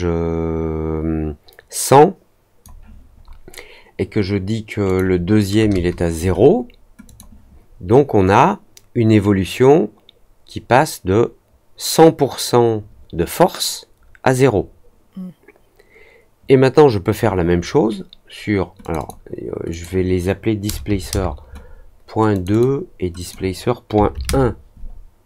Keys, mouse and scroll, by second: 4.8 click, 7.0 click, 8.3-17.1 drag, 18.7 click, 18.9 click, 19.6 click, 22.3 click, 22.4 click, 23.1 click.